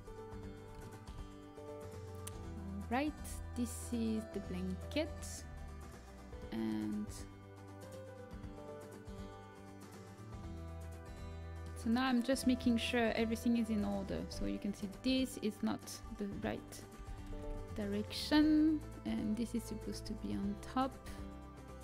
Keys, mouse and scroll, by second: 3.2 l, 5.4 a, 15.9 l, 16.9 r, 18.3 a, 19.1-21.0 right drag.